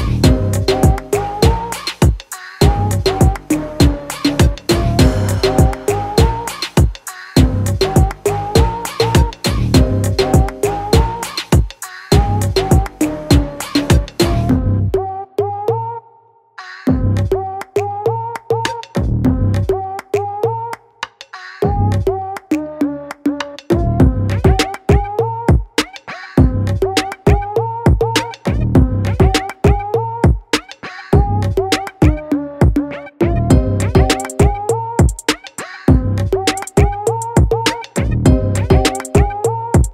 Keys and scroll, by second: 2.4 ctrl+t, 7.0 ctrl+u, 15.5 ctrl+u, 32.6 ctrl+t.